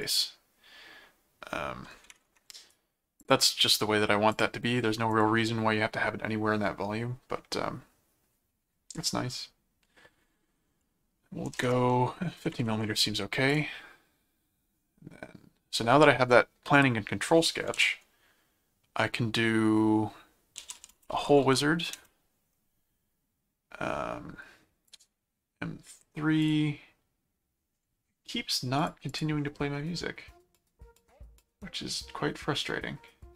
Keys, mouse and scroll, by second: 0.0 right click, 2.5 right click, 3.2 click, 4.3 click, 5.1 click, 13.5 click, 17.8 s, 20.3-21.9 typing, 24.9 click, 26.4 click, 28.8 click.